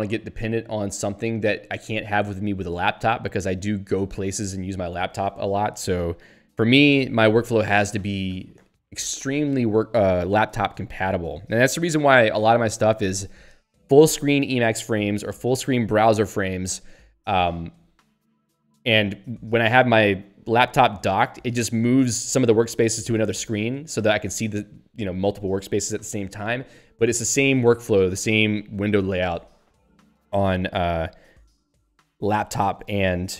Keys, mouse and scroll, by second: 16.3 ctrl+g.